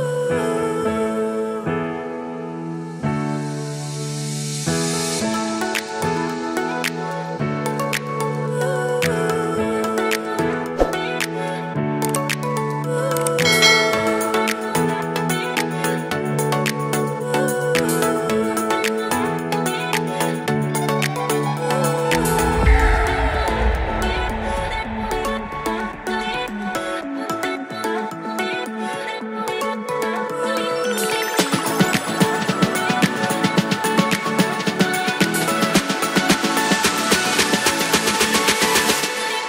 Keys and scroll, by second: 5.3 super+s, 7.8 super+s, 25.9 super+s, 37.4 super+c, 39.3 super+v.